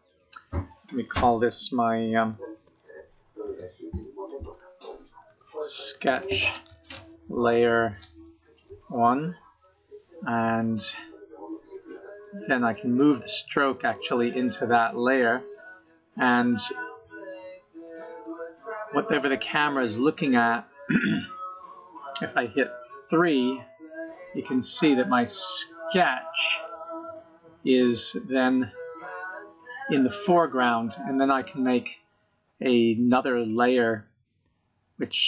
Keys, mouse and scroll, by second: 12.5 click, 17.7 KP_0, 22.3 KP_3, 23.4-24.2 scroll down 7, 24.1 middle click, 26.2-27.1 scroll up 8, 27.2 scroll down 2, 27.2 scroll up 1, 27.5-28.0 scroll down 2, 28.0 middle click, 31.7-32.9 scroll down 1, 32.9 right click.